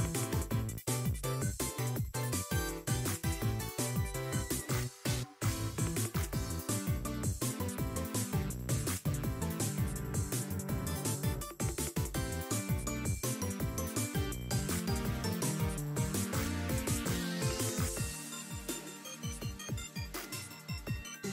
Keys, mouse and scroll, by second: 0.4-1.5 drag, 1.9 middle click, 2.3 shift+middle click, 3.4 r, 5.2 scroll down 3, 5.5 shift+middle click, 6.8 r, 7.9-8.2 scroll down 2, 8.8-10.6 drag, 10.7 scroll down 4, 10.9 shift+middle click, 11.5-12.3 scroll down 3, 11.8 middle click, 12.5 scroll down 1, 12.6 middle click, 13.5 click, 13.9-17.2 drag, 17.7 click, 18.4-19.1 scroll up 3, 19.4-21.3 drag.